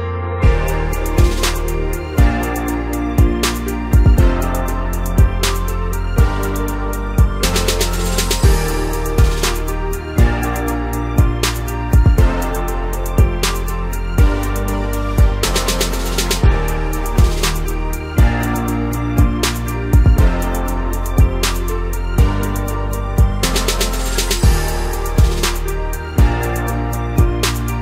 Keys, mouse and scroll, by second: 3.3 click, 3.9-4.7 middle drag, 4.7-5.1 scroll up 2, 5.1 scroll down 1, 5.3-8.3 middle drag, 8.4-8.9 scroll up 2, 11.0 scroll down 1, 11.3-12.0 middle drag, 12.0-13.7 scroll up 2, 13.7-15.5 drag, 15.5-18.6 middle drag, 19.1 click, 19.7-21.4 middle drag, 21.4-25.2 drag, 25.2-25.8 middle drag, 25.8-26.1 scroll up 1, 26.1-27.8 middle drag.